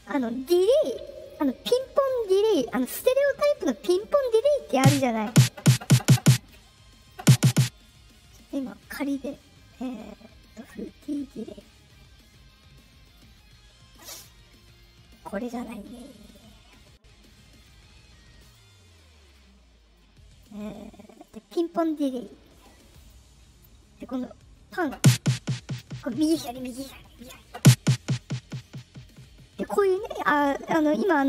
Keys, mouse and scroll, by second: 6.9 click, 8.3 click, 13.0 click, 15.1 click, 16.2 click, 18.3 click, 19.9-20.4 drag, 21.1 drag, 22.9 click, 23.9 click.